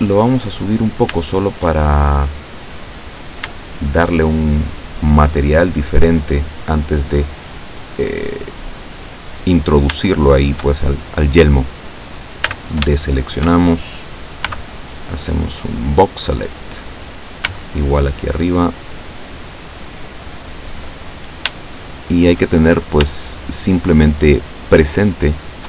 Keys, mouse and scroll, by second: 0.7 middle click, 1.9 shift+click, 3.6 shift+middle click, 4.5 shift+click, 8.5-8.8 scroll down 1, 9.7 scroll up 2, 10.3 shift+middle click, 12.5 a, 13.1 shift+click, 13.6 shift+middle click, 14.5 b, 15.6 click, 17.5 b, 18.1-20.5 drag, 21.1-21.5 scroll up 1, 21.8 shift+middle click, 24.3 shift+right click, 25.4 shift+right click.